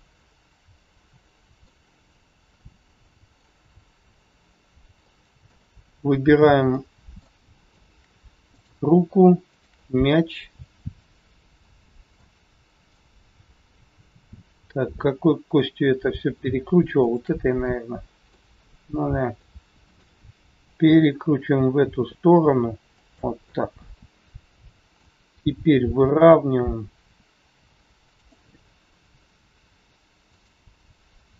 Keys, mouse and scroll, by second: 0.2 middle click, 2.6 middle click, 2.6 scroll up 1, 3.6 scroll down 2, 4.2 scroll up 2, 5.0 shift+middle click, 5.6-6.6 scroll up 1, 6.6 middle click, 7.4 shift+scroll up 1, 7.5 middle click, 9.2 click, 9.5 shift+click, 11.5 scroll down 1, 12.1 middle click, 17.0 shift+click, 17.6 middle click, 19.2 scroll down 3, 19.3 middle click, 20.7 r, 23.3 middle click, 26.0 r, 28.7 scroll up 2, 30.3 shift+click.